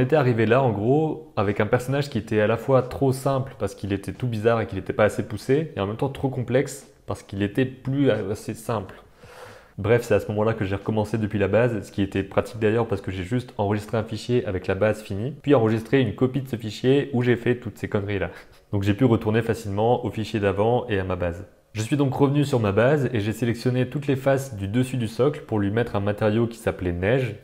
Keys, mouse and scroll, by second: 9.7 click, 18.7 click, 21.7 KP_7, 21.8 c, 23.5-25.1 drag, 26.4 middle click, 26.7 Tab, 26.9 click, 27.2 Tab, 27.3 middle click.